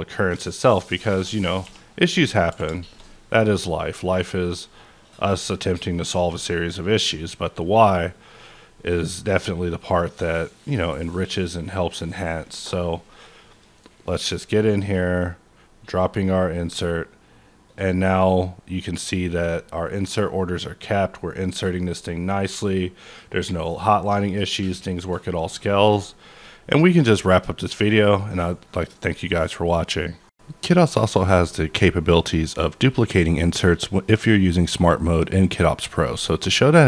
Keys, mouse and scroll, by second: 0.2-1.0 scroll down 1, 1.0 click, 1.4 click, 1.6 q, 2.0 click, 2.5 q, 2.8 shift+click, 3.8 middle click, 5.2 click, 6.1 click, 6.9-7.6 scroll up 9, 7.6-8.0 scroll down 4, 8.0-8.4 scroll, 8.4-8.7 scroll down 9, 8.7-10.0 scroll up 1, 10.0-10.6 scroll up 2, 10.6 scroll, 11.9 click, 11.9-12.6 scroll up 1, 12.6 click, 13.5 click, 14.1-15.6 scroll down 18, 15.6-17.6 scroll up 6, 17.6 click, 18.2 click, 19.0 click, 20.0-20.9 scroll down 8, 20.9-22.4 scroll up 3, 22.4-22.9 scroll up 1, 22.9-23.7 scroll up 1, 23.7-25.3 scroll down 4, 25.3 click.